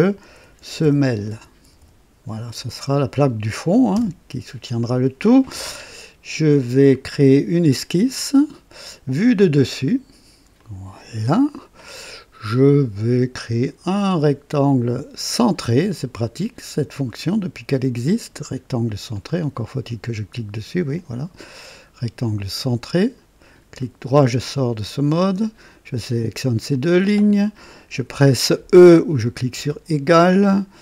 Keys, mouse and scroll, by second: 0.1-2.5 typing, 3.7-6.5 typing, 8.1 click, 9.6 click, 10.6 click, 12.1-13.0 right drag, 13.9 click, 15.9 click, 19.1 click, 20.9 click, 23.0 click, 23.8 right click, 25.2 click, 26.7 click, 29.5 e.